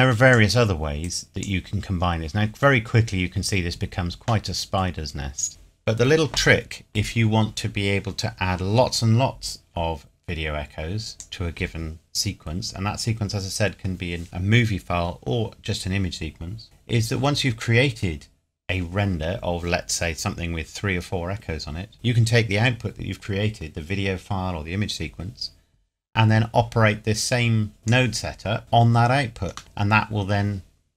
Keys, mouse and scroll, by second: 2.0-2.4 scroll down 1, 4.4 middle click, 11.1 click, 27.8 click, 29.6 middle click.